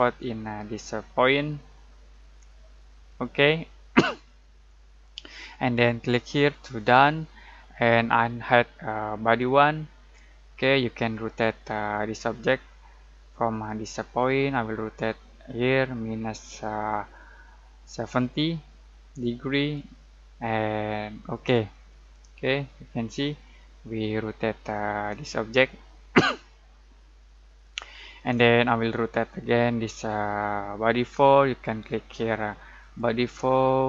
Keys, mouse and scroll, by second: 3.0 click, 6.7 click, 9.2 click, 10.1-10.4 scroll down 1, 14.1-21.2 drag, 21.8-29.2 middle drag, 29.2-31.3 scroll down 1, 32.8 click.